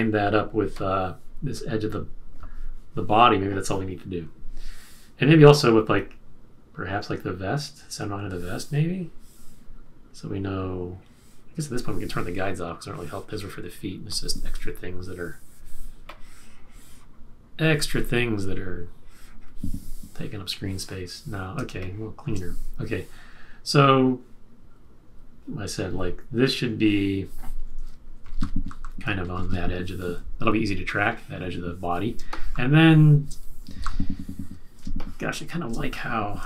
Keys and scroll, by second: 21.6 space, 28.2 shift+Down, 28.3 shift+Down, 28.7 shift+Up, 29.1 Down, 29.3 Down, 29.4 Down, 30.5 z, 32.1 space, 33.7 super+-, 34.7 space.